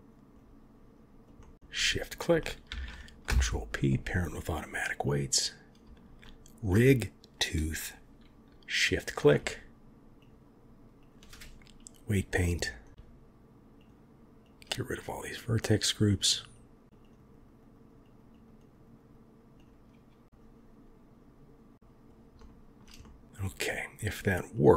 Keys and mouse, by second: 0.3 click, 1.3 middle click, 2.6 ctrl+p, 5.0 click, 6.2 shift+click, 10.1-11.0 drag, 14.4 click, 14.5 click, 15.0 click, 15.1 click, 15.5 click, 15.7 click, 15.8 click, 16.0 click, 16.3 click, 16.8 click, 17.2 click, 17.4 click, 17.5 click, 18.0 click, 18.1 click, 18.2 click, 18.5 click, 18.8 click, 18.9 click, 19.0 click, 19.6-22.0 drag, 22.3 shift+click, 23.0 middle click, 23.3-23.7 middle drag, 24.5 click.